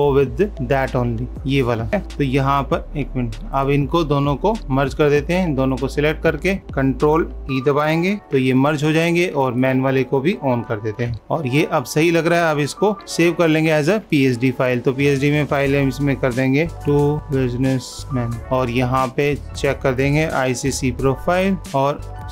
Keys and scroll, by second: 1.3 ctrl+z, 2.2 ctrl+s, 11.1 super+-, 13.7 ctrl+s.